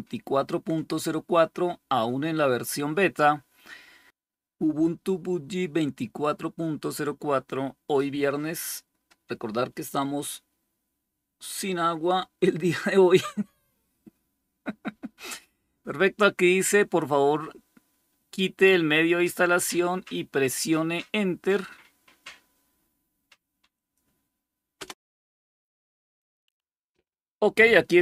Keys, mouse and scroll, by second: 23.6 click, 24.7 Return, 26.1 click, 26.4 click.